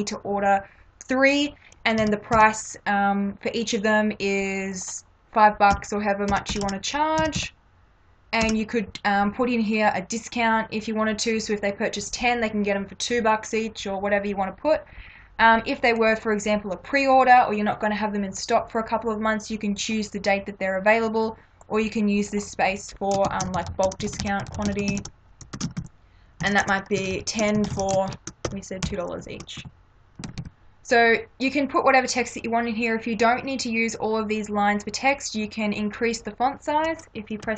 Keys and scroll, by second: 2.0 3, 2.4 Delete, 5.7 5, 6.3 ., 6.6 0, 7.2 Delete, 8.4 0, 23.3-30.4 typing.